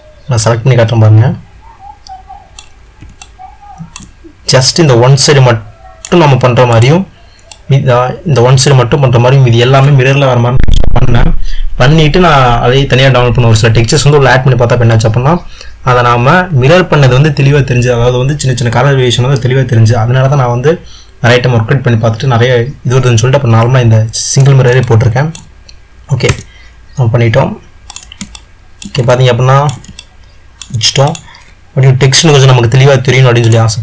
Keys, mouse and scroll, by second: 3.4-4.8 ctrl+middle drag, 4.8-6.2 drag, 6.9 click, 7.6-8.8 drag, 24.9-27.0 middle drag, 27.0 Tab, 28.6-31.3 middle drag, 31.3 click.